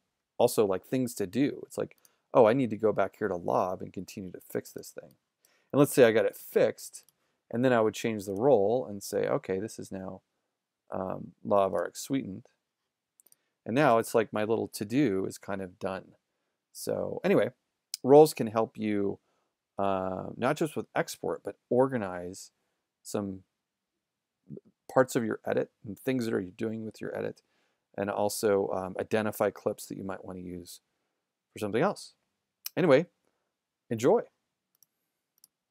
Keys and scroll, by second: 5.1 z, 6.4 a.